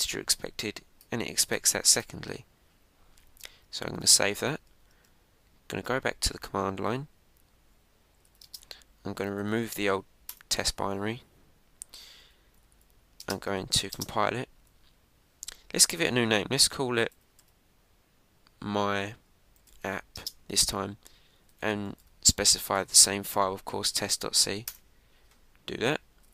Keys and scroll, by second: 4.9 super+s, 5.8 super+Tab, 11.2 Return, 25.6 Return.